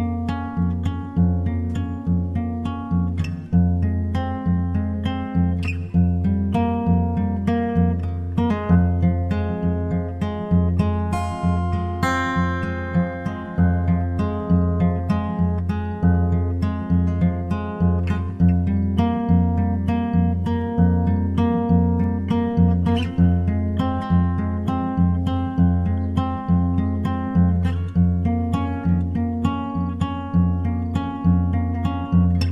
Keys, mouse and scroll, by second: 0.0 shift+d, 0.5-2.1 drag, 0.8 g, 3.9-7.5 drag, 4.4 s, 7.0 d, 7.7-9.5 drag, 8.0 b, 8.6 f, 9.1 y, 11.8-14.8 right drag, 14.1 shift+d, 14.9-16.6 drag, 15.7 g, 17.4-19.1 drag, 17.7 g, 17.9 s, 19.3 s, 21.2-28.9 drag, 21.7 g.